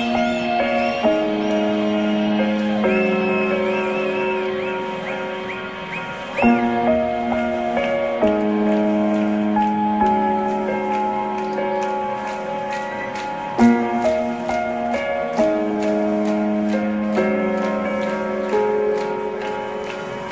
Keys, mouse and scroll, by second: 1.5 t, 15.9 KP_0, 18.6-20.3 drag.